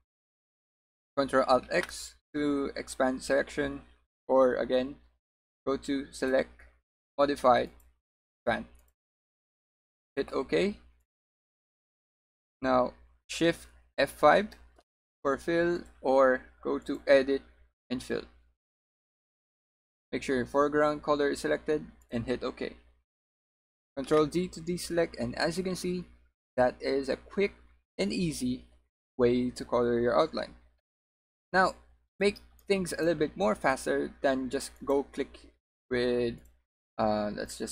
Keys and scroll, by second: 14.4 F5.